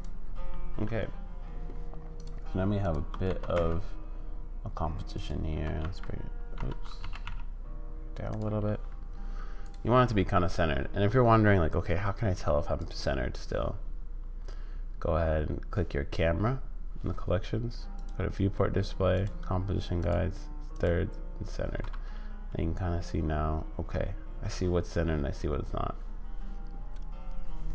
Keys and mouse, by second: 2.1 click, 2.8 shift+click, 3.2 g, 5.6 g, 7.0 g, 9.6 click, 18.0 click, 19.1 click, 20.0 click, 20.7 click.